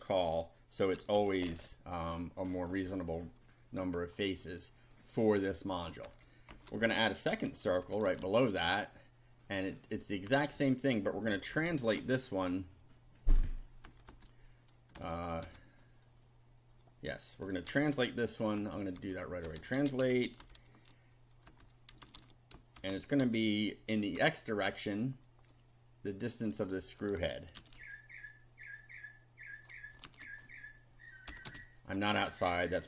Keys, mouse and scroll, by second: 0.7-1.7 typing, 6.1 Home, 6.5 shift+End, 7.3 ctrl+c, 7.5 ctrl+End, 7.9 ctrl+Return, 8.2 ctrl+v, 10.3 Home, 11.1-12.5 typing, 13.9 BackSpace, 15.0 BackSpace, 17.7-24.2 typing, 26.3 click, 27.5 ctrl+c, 29.5 click, 30.0 ctrl+v, 31.3 ,, 31.4 space, 32.7-32.8 typing.